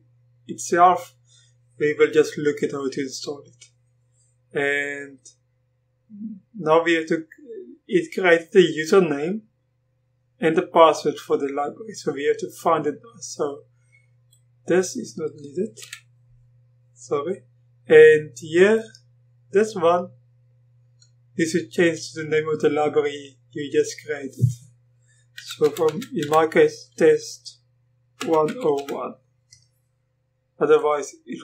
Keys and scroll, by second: 15.8 BackSpace, 25.4-26.7 typing, 28.0-29.3 typing.